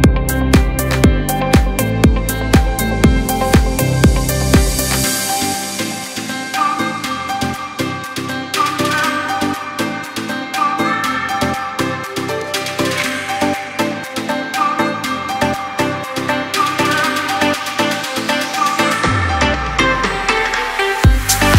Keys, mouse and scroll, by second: 1.8 click, 4.0-10.3 drag, 13.2 space, 13.4 click, 13.7 space, 14.1 click, 15.7 p, 18.2 click, 19.5 shift+click.